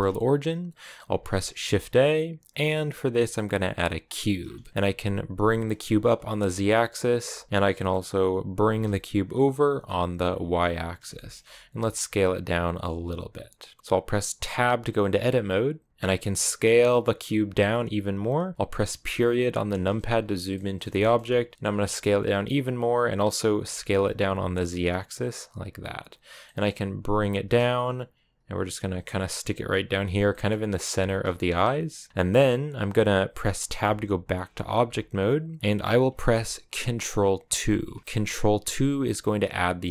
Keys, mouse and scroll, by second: 3.9 shift+a, 4.2 scroll down 1, 4.4 middle click, 5.3 g, 7.5-8.6 middle drag, 8.6 g, 11.0 shift+middle click, 11.2 scroll up 2, 11.4 s, 13.6 middle click, 13.8-14.3 scroll up 3, 14.3 Tab, 15.9 scroll up 1, 16.0 s, 19.4 KP_Decimal, 20.0-20.4 scroll down 4, 20.4 middle click, 20.6-21.5 scroll down 3, 20.8 shift+middle click, 21.5 s, 23.6 s, 26.3 middle click, 27.1 g, 28.9 middle click, 29.3 s, 29.7 g, 30.1 middle click, 30.5 g, 30.9 middle click, 31.2 s, 32.0-33.6 middle drag, 33.6 Tab, 34.5-37.3 scroll up 2, 37.3 ctrl+2.